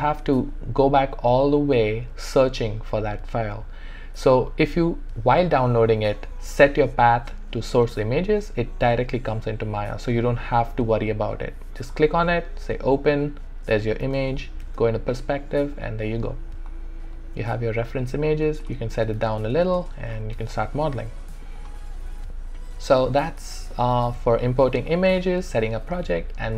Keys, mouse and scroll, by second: 12.7 click, 14.0 space, 15.3 click, 15.7-19.0 alt+drag, 19.3 alt+click, 20.4 alt+right click, 20.6 alt+click, 23.7 alt+middle click, 24.2-26.5 alt+right drag.